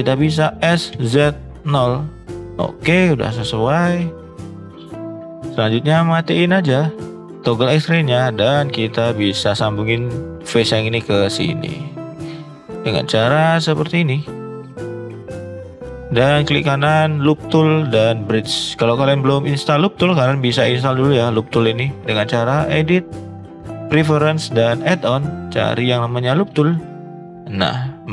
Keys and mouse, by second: 0.6 s, 3.1 shift+middle click, 3.9 middle click, 4.5 shift+middle click, 5.0 middle click, 6.2 click, 7.1 shift+middle click, 7.6 middle drag, 9.0 click, 13.3 shift+click, 15.5 shift+click, 16.4-18.3 right drag, 20.1-21.6 right drag, 22.7-23.8 drag.